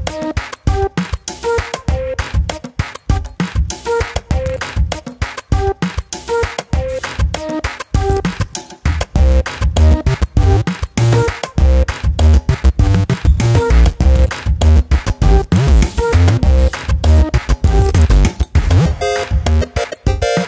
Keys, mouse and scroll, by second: 0.1-1.6 scroll up 5, 0.4 KP_7, 1.8 alt+/, 2.2 click, 2.7 alt+/, 3.0 click, 3.7-4.1 scroll down 5, 4.1 shift+middle click, 4.3-4.6 scroll up 3, 4.6 click, 6.7 Tab, 7.0-8.1 right drag, 8.1 drag, 8.3 scroll down 4, 8.5 middle drag, 8.8 click, 8.9 scroll up 1, 9.1-9.5 shift+middle drag, 9.5 ctrl+s, 10.6 shift+s, 11.5 drag, 11.7-12.0 scroll down 1, 12.0 /, 12.3 scroll down 1, 12.5-14.4 middle drag, 14.6 ctrl+s, 15.8-16.8 drag, 17.3 /, 17.6 KP_7, 17.8 scroll down 2, 18.0 Tab, 18.4 s, 19.3 scroll up 6, 19.8 shift+middle click.